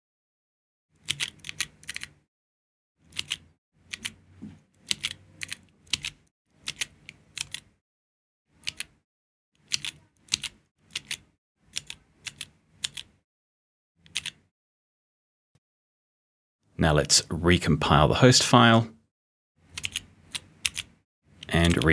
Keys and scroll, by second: 0.8-7.3 typing, 8.6 p, 9.6 t, 10.2 d, 10.9 d, 11.7 s, 14.0 p, 15.5 p, 19.7 b, 20.6 r, 21.6 b.